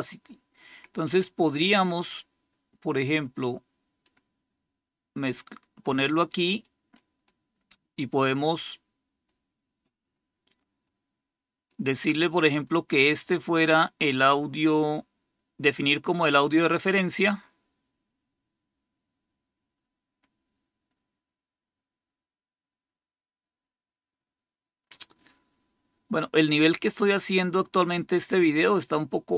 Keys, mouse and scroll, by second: 3.2 click, 3.9-5.7 drag, 6.5 click, 8.0 click, 8.4 click, 9.9 click, 10.8 click, 12.3 click, 13.4 right click, 15.7 click.